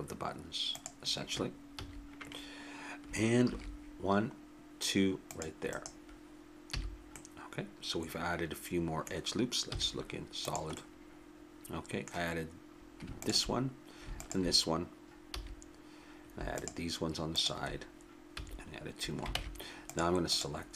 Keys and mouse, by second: 1.8 a, 3.4 ctrl+r, 6.7 a, 9.7 z, 13.1-19.0 drag, 15.3 a, 18.4 a, 19.3 ctrl+Tab, 20.3-20.7 drag.